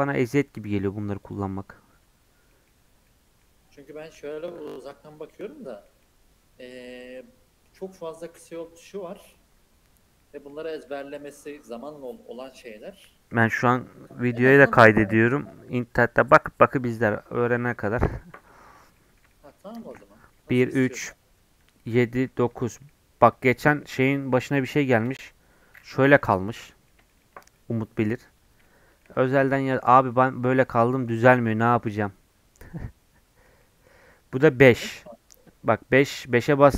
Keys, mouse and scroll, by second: 2.3 scroll down 3, 2.5 middle click, 2.9 scroll up 1, 3.1 middle click, 3.4 scroll down 1, 3.7 scroll up 4, 4.0 middle click, 4.9 scroll down 1, 5.2 middle click, 5.9 scroll down 1, 6.0-9.0 middle drag, 17.7 middle click, 18.2 scroll up 3, 18.5 middle click, 18.7 scroll down 1, 19.0-20.4 middle drag, 20.4 KP_1, 20.6 KP_3, 21.9 KP_7, 22.4 KP_9, 22.9 middle click, 23.7 scroll down 1, 23.8 middle click, 24.1 scroll up 2, 24.4 middle click, 25.1 KP_5, 25.8-28.2 middle drag, 28.2 scroll up 4, 28.6-30.0 shift+middle drag, 30.0 scroll down 2, 30.1-34.6 middle drag, 34.6 KP_5, 35.5 KP_5.